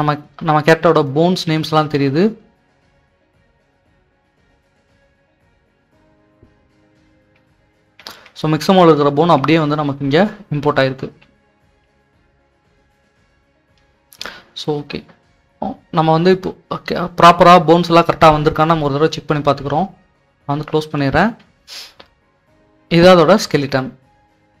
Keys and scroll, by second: 0.3-1.0 typing, 6.2-13.3 typing, 15.0-15.8 typing, 16.9-18.7 typing.